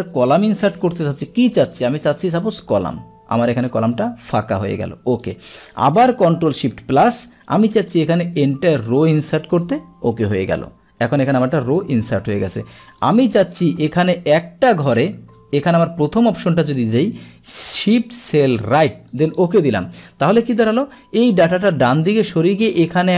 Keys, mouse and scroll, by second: 0.4 click, 2.7 click, 5.1 click, 8.8 click, 9.7 click, 13.1 click, 15.4 click, 16.3 click, 19.1 click.